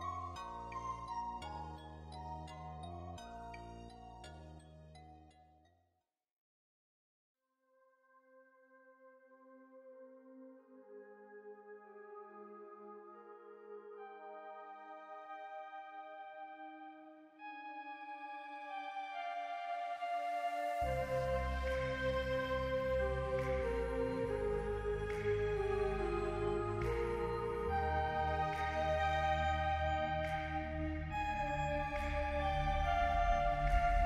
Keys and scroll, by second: 1.0-2.5 typing, 11.6-13.1 typing, 14.8 z, 16.5 p, 18.4 r, 20.9-22.1 typing, 23.3 Escape, 23.5-24.4 typing, 32.4-33.2 typing.